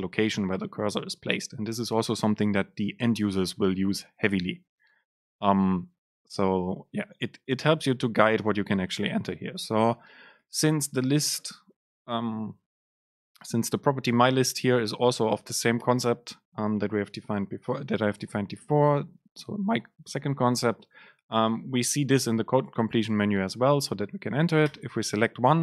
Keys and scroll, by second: 21.6 super+space.